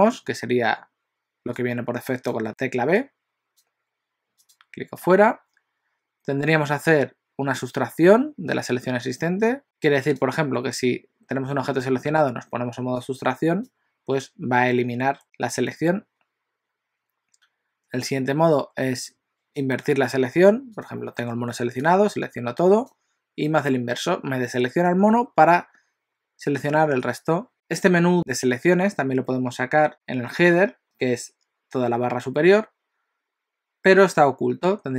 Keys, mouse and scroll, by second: 1.5 click, 4.5 click, 9.2-9.6 click, 10.0 click, 11.8 click, 13.0 click, 19.1 click, 20.7 click, 21.8 click.